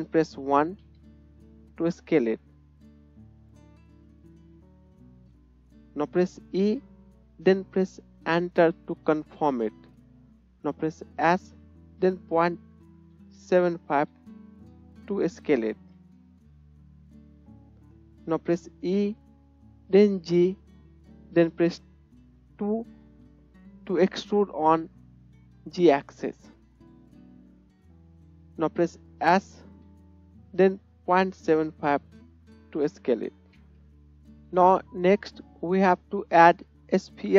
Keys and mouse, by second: 3.9-18.6 middle drag, 6.5 e, 11.3 s, 16.4 KP_1, 18.9 e, 21.9-23.3 middle drag, 29.8 s, 33.9-37.3 middle drag.